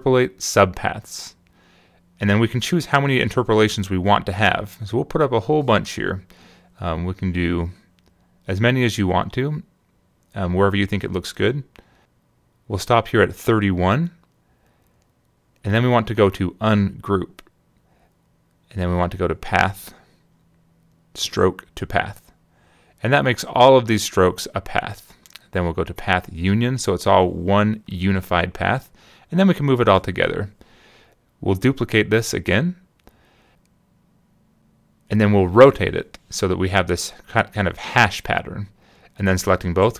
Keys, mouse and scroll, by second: 2.1 click, 5.0 click, 5.3 click, 9.3 click, 18.0 click, 20.2 click, 23.4 click, 25.3 click, 27.3 click, 30.4 right click, 34.7 click, 36.9 click, 39.3 shift+click.